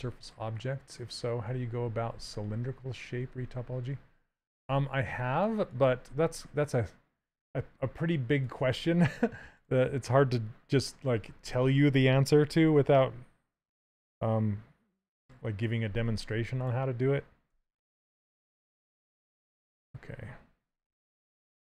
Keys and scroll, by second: 17.7 d.